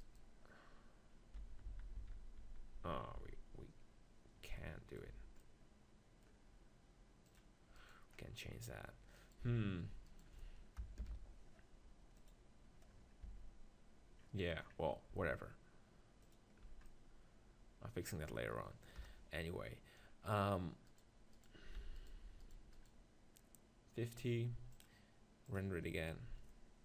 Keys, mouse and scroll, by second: 0.0-1.9 right drag, 1.5 ctrl+z, 1.9 ctrl+z, 2.2 ctrl+z, 2.4 ctrl+z, 2.8 ctrl+z, 3.3 ctrl+z, 4.6 middle click, 5.1 z, 5.6 middle click, 7.3-9.4 drag, 7.8-9.4 right drag, 8.2-9.4 middle drag, 9.4 Tab, 11.0 ctrl+l, 13.3 Tab, 19.0 KP_0, 20.0 middle click, 20.9-24.7 right drag, 21.8 z, 24.7-26.6 drag.